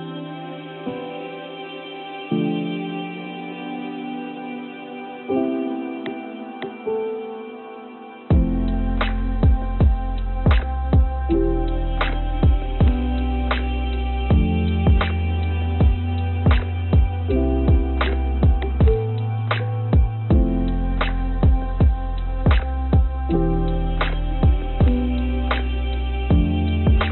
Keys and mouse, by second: 1.9 y, 3.0 x, 4.1 g, 6.7 g, 11.5 click, 12.2 g, 14.6-16.9 drag, 17.3 click, 25.5 click, 26.6 click.